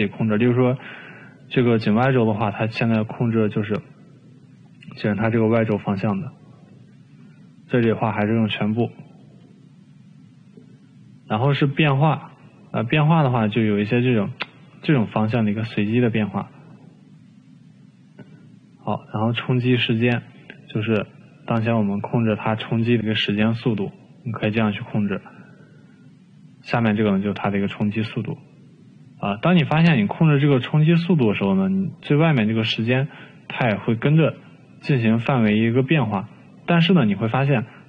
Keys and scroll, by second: 8.0 ctrl+z, 26.4 ctrl+z.